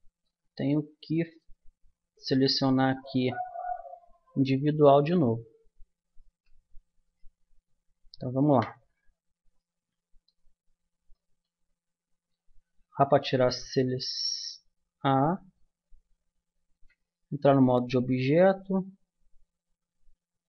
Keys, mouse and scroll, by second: 0.6-4.2 middle drag, 3.7 a, 4.9 a, 6.3 a, 7.1-8.5 drag, 8.5 KP_Decimal, 8.9 middle click, 12.6 a, 16.2-19.1 middle drag, 16.7 Tab.